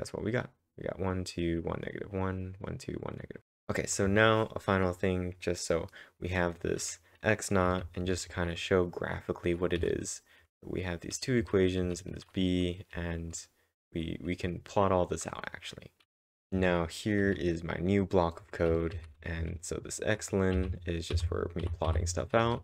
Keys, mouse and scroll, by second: 0.1-0.9 typing, 2.6-3.4 typing, 5.2-6.1 typing, 7.6-8.5 typing, 10.4 typing, 16.0-16.6 typing, 17.6 typing, 18.7 typing, 20.6 typing.